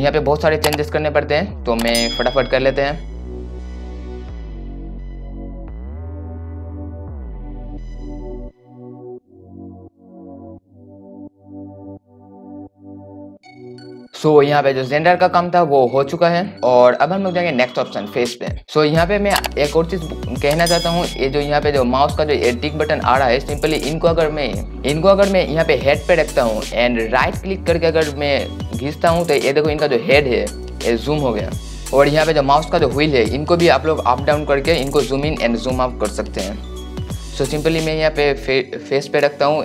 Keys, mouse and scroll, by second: 6.2-10.7 drag, 13.0 scroll down 1, 13.3 click, 17.9 click, 27.3 right click, 31.9 scroll up 1, 32.1 scroll down 1, 32.5 scroll up 1, 33.4 scroll down 1, 34.5 scroll up 1.